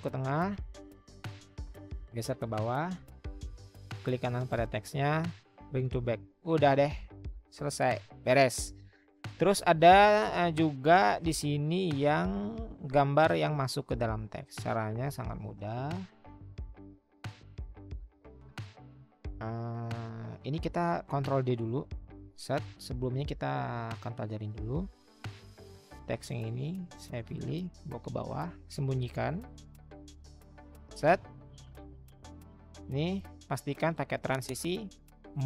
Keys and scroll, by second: 0.4 Down, 0.4 Right, 0.9 Down, 1.0 Down, 1.4-2.4 Down, 7.4 Down, 7.6 Down, 11.4 Down, 22.3 ctrl+d, 28.5-30.7 Down.